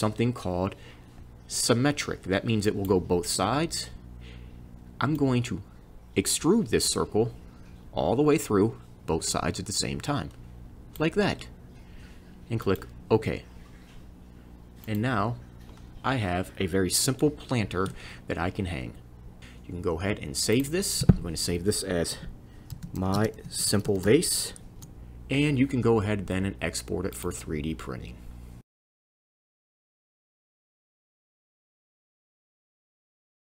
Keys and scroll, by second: 22.5-25.2 typing.